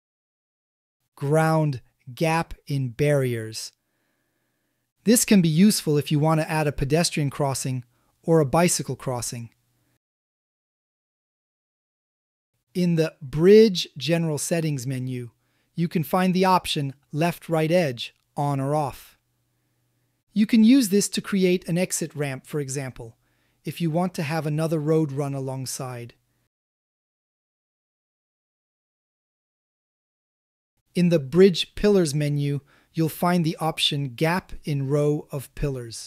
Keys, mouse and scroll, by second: 2.0 click, 3.9-11.3 drag, 12.2 click, 13.1 a, 13.2 a, 14.0 click, 15.8 click, 16.5 click, 17.1 click, 18.9 shift+middle click, 19.3 drag, 19.5 middle click, 20.1 click, 21.2 ctrl+click, 21.5 g, 21.9 x, 22.7 KP_Subtract, 23.1 KP_1, 23.3 KP_Enter, 23.3 KP_5, 24.2-24.6 middle drag, 24.8 a, 25.0 a, 25.2-25.7 middle drag, 26.1-27.6 ctrl+middle drag, 30.8 click, 31.3 a, 31.5 a, 32.0-32.9 drag, 34.6 click.